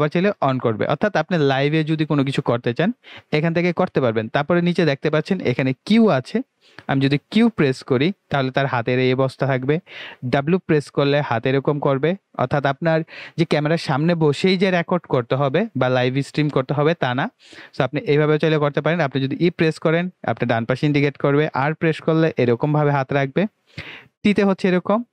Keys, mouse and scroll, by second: 2.6 typing, 7.4 q, 10.6 w, 19.0 e, 21.6 r, 24.2 t.